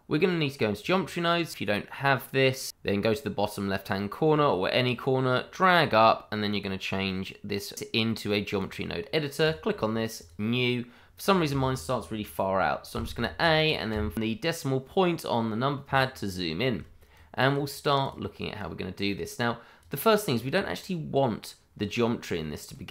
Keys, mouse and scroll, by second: 1.4 right click, 2.1 click, 2.3 double click, 4.8 click, 8.5 click, 12.9 a, 13.9 KP_Decimal, 16.2-17.1 scroll down 1, 17.1 click, 22.7 middle click.